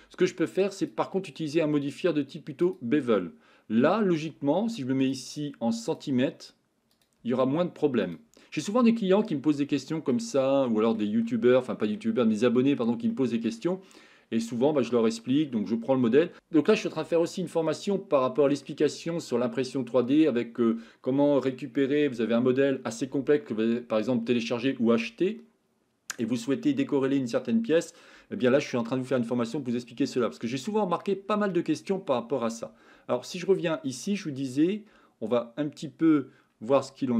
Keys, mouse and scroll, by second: 0.9-2.8 drag, 6.0 click, 7.0-8.1 drag, 9.6-10.1 shift+middle drag, 10.4 middle click, 11.3-11.8 shift+middle drag, 12.2-12.8 middle drag, 13.1 shift+middle click, 14.7-15.4 middle drag, 17.9-18.7 middle drag, 28.9-31.0 middle drag, 31.8 shift+middle click, 36.8-37.1 shift+middle drag.